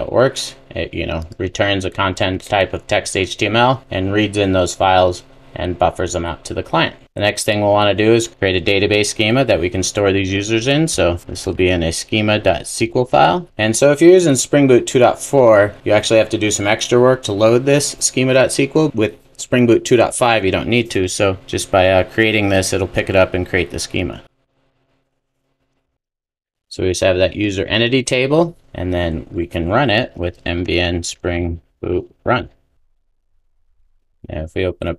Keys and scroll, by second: 28.9 super+s.